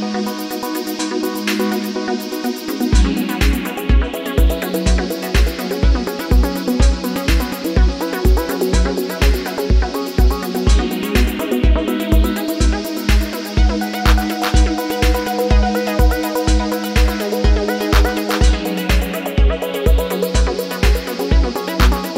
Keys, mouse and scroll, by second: 0.2 KP_3, 0.6 e, 0.8 Tab, 1.2 Tab, 2.5 super+z, 2.7-4.2 typing, 3.1 super+z, 4.5 Tab, 4.8 Tab, 5.1 click, 5.5 Tab, 7.1 Tab, 7.3 z, 7.3 Tab, 8.5 Tab, 9.2 e, 9.3 super+z, 12.0 shift+d, 13.7 click, 14.7 click, 15.0 a, 16.1-18.6 typing, 16.2 super+Tab, 18.9 shift+Tab, 19.8 Tab, 19.9 super+z, 20.1 g, 20.2 Tab, 20.5 KP_7, 22.1 super+s.